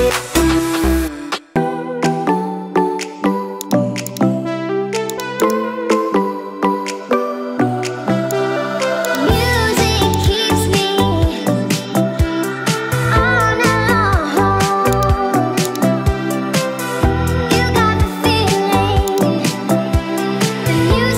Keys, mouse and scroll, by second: 0.0 f, 0.3 click, 0.5 click, 0.9 click, 1.2 KP_9, 1.4 click, 2.5 KP_Divide, 3.6 click, 5.1 drag, 5.4 click, 9.1-10.6 drag, 14.9 click, 19.1-20.3 drag, 20.3 space.